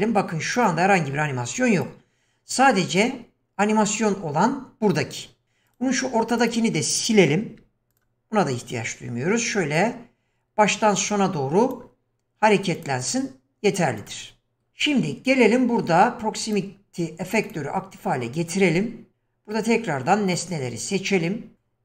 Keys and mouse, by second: 1.7 click, 3.0 click, 4.0 click, 5.7 click, 6.4 click, 7.5 x, 9.8-11.8 drag, 12.8 click, 14.6 middle click, 16.5 click, 17.5 click, 19.1-20.5 drag, 21.5-21.8 drag.